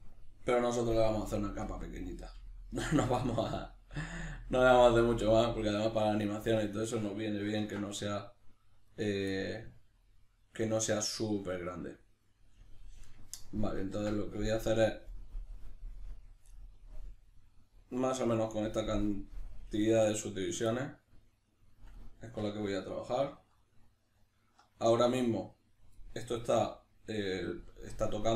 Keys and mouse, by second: 1.7 s, 4.1 click, 4.6 g, 5.2 click, 5.6-9.0 middle drag, 7.6 ctrl+r, 9.0 right click, 9.4-20.3 middle drag, 20.3 right click, 20.7-21.9 middle drag, 21.9 right click, 22.3 l, 25.9-28.3 middle drag.